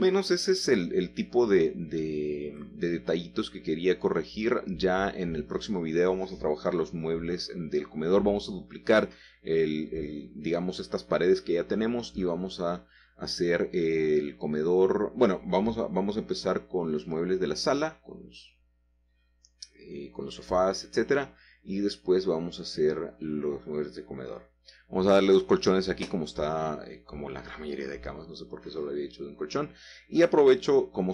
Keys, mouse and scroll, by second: 0.6 shift+middle click, 0.8 shift+middle click, 0.9 shift+middle click, 1.7 shift+middle click, 1.9 shift+middle click, 2.1-3.4 shift+middle drag, 3.4-4.3 scroll up 1, 5.5-6.7 shift+drag, 7.3 g, 7.9 z, 9.9-11.5 drag, 12.1 shift+middle click, 12.4-13.1 scroll down 1, 13.1 middle click, 13.9 shift+middle click, 14.8-15.9 drag, 16.2-20.0 typing, 19.2 Escape, 21.1 typing, 24.9 shift+click, 25.3-26.6 shift+middle drag, 27.0 click, 27.8-28.4 shift+scroll down 3, 27.8 shift+middle click, 28.0 shift+click, 28.1 click, 29.6 g, 30.1 z.